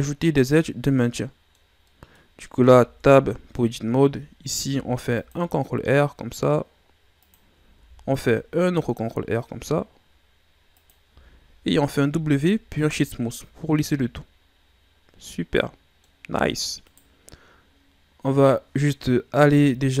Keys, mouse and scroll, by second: 0.4-1.0 scroll down 3, 1.0-2.3 middle drag, 2.3-2.6 scroll up 3, 2.6 Tab, 3.3-4.6 ctrl+scroll down 1, 4.6 ctrl+r, 7.7 ctrl+r, 11.0 Tab, 12.0 w, 13.3 a, 13.6 scroll down 4, 13.8-16.8 middle drag, 16.8 right click, 19.4 KP_7.